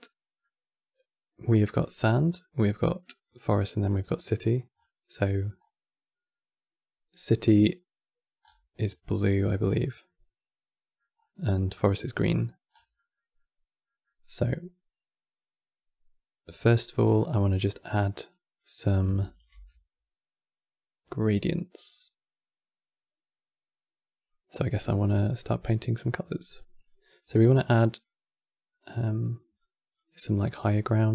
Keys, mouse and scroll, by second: 2.9 click, 3.6 click, 4.6 scroll up 6, 4.8 middle click, 5.3 scroll up 4, 8.1-8.5 scroll down 5, 9.4 scroll down 2, 9.7-10.8 middle drag, 10.8 scroll up 4, 12.4 scroll down 5, 12.6-16.7 middle drag, 18.0-19.2 drag, 19.2 t, 26.5-31.1 drag.